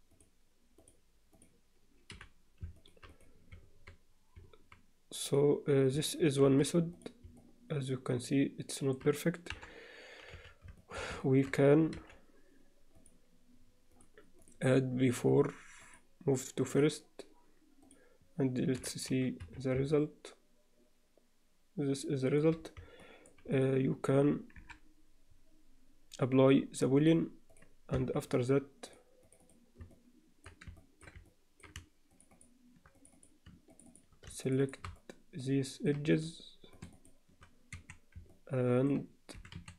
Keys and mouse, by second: 0.8 click, 1.3 click, 2.1 h, 3.1 click, 6.4 alt+h, 6.9 click, 7.4-8.9 alt+middle drag, 9.5 KP_7, 10.3 z, 10.8 shift+middle click, 11.2 ctrl+middle click, 11.9 g, 13.9 click, 15.9-16.9 drag, 17.9 click, 18.7 h, 19.4 z, 19.9-22.4 alt+middle drag, 23.0 middle drag, 23.5 click, 24.5 KP_7, 27.1-27.7 drag, 27.9 Tab, 28.9 click, 29.2 click, 29.9 middle click, 30.8 ctrl+alt+middle click, 31.3 alt+middle click, 32.3 shift+click, 32.9 click, 33.7 shift+click, 34.5 shift+click, 35.0-35.9 alt+middle drag, 36.7 shift+click, 37.7 1, 38.3 middle click, 39.3 e.